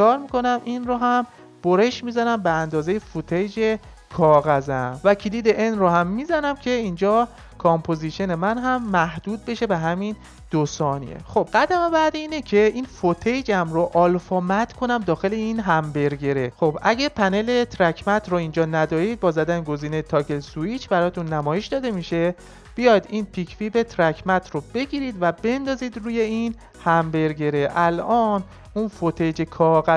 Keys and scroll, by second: 5.4 n.